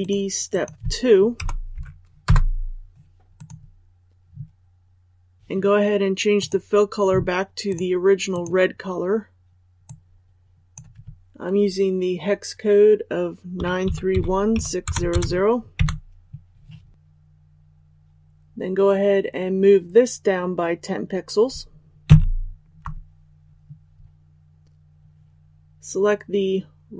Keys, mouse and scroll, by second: 1.3 BackSpace, 2.2 Return, 3.3 click, 24.5 click.